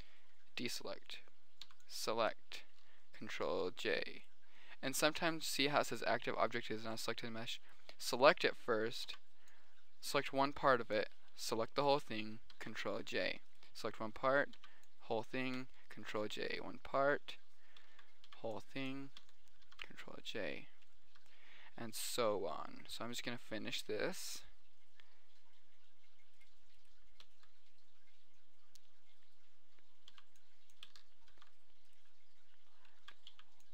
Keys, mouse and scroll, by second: 0.2 a, 2.1 b, 3.4 ctrl+j, 9.4 b, 12.9 ctrl+j, 15.0 b, 16.3 ctrl+j, 18.7 b, 20.0 ctrl+j, 23.6 middle click, 24.8 middle click, 26.0 middle click, 26.7 right click, 27.8 click, 27.8 middle click, 28.7 right click, 30.4 b, 31.7 ctrl+j, 33.6 b.